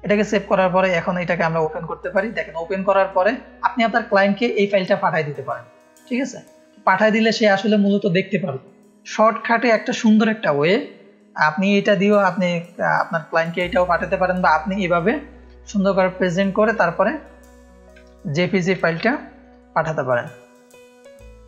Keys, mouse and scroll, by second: 0.8 click, 2.6-3.5 scroll down 1, 3.9-6.2 scroll down 2, 6.2-7.8 scroll up 1, 10.7-11.3 scroll down 1, 13.6 scroll down 1, 15.3 click, 16.5 click, 18.0 ctrl+space, 18.0 ctrl+click, 18.8 ctrl+space, 18.8 ctrl+click, 19.3 click, 19.6 click, 19.9 ctrl+space, 19.9 ctrl+click, 20.3 click, 20.7 click.